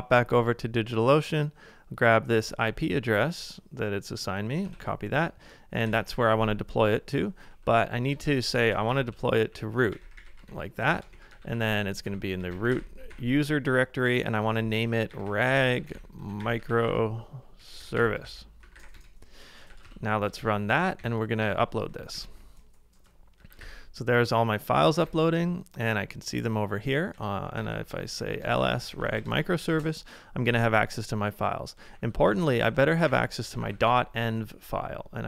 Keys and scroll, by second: 4.6 super+Tab, 5.8 super+v, 8.1 ctrl+c, 8.3 b, 11.0 ctrl+c, 11.2-13.6 typing, 14.8-19.8 typing, 19.8 ctrl+a, 20.5 Page_Up, 21.0 Page_Up, 22.1 Return, 23.3-25.3 typing, 26.9-27.9 typing, 32.0 Up, 32.0 typing, 32.3 alt+Left, 33.1 alt+Right, 33.7 typing.